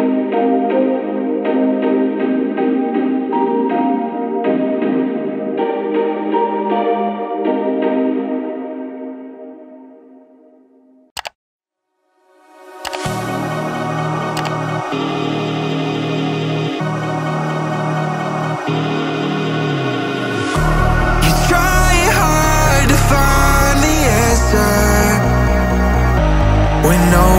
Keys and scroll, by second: 1.1 Return, 2.1 ctrl+shift+], 21.2 ctrl+i.